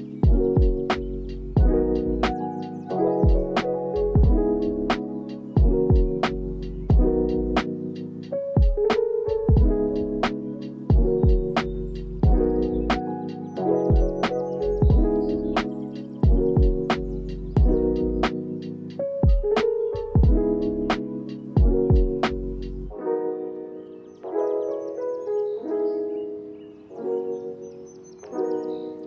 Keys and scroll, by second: 7.8 ctrl+s, 19.4 ctrl+s, 25.6 n, 25.9 space.